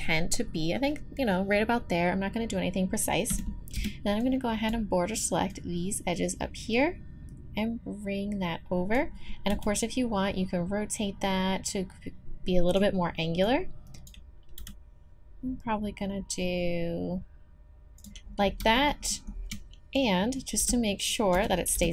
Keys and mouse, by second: 3.3 a, 3.7 b, 5.5-8.9 drag, 9.5 r, 13.4-17.8 drag, 14.6 r, 20.1-21.9 drag, 20.6 b, 21.3 a, 21.7 b.